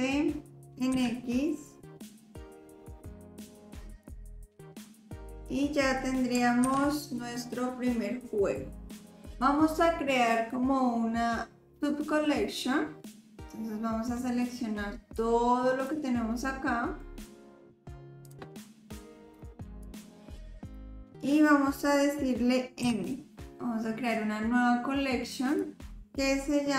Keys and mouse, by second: 3.1-5.5 drag, 6.6 ctrl+s, 13.4 middle click, 15.2-15.8 drag, 17.0-17.3 drag, 19.9 click, 22.8 m.